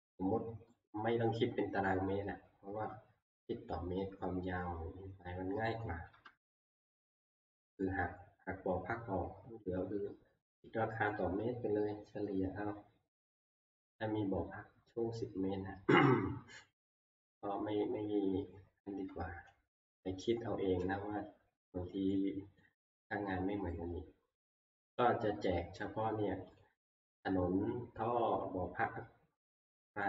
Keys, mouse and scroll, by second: 1.2 scroll up 1, 4.9 scroll, 7.3 scroll, 8.1 scroll, 17.1 click, 17.7 scroll, 19.8 alt+Tab, 22.6 middle click, 23.0 scroll, 23.2 scroll down 5, 24.7 middle click, 26.6 click.